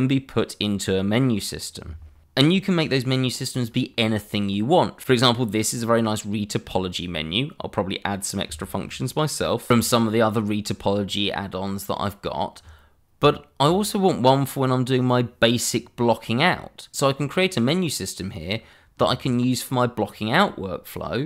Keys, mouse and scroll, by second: 3.9 middle click, 5.6 shift+middle click, 5.7 middle click, 5.8 shift+middle click, 6.1 shift+scroll up 2, 6.4 middle click, 7.1-7.6 scroll down 1.